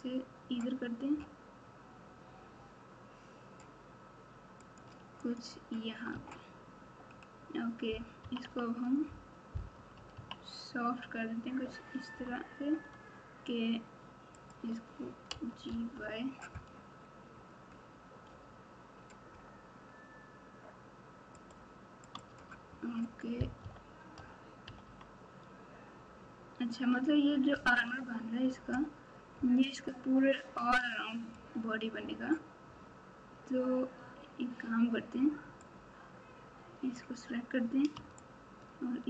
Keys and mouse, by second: 5.3 click, 6.1 Tab, 8.2 KP_6, 9.7 KP_6, 10.1 KP_6, 12.0 Tab, 14.4 click, 15.3 g, 22.1 click, 22.3 Tab, 23.6 KP_8, 24.1 KP_4, 24.6 KP_4, 27.5 KP_1, 27.9 Tab, 28.4 Tab, 35.6-36.9 drag, 38.2 shift+click, 38.5 shift+click.